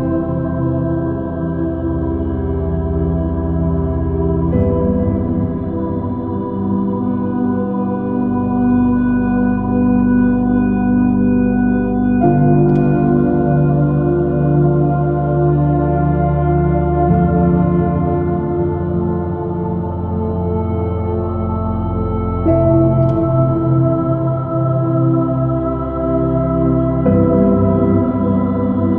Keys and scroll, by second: 2.6 s, 5.0 b, 13.3 space, 14.9 space, 17.8 b, 22.9 space, 24.5 space, 25.1 super+-, 26.8 space.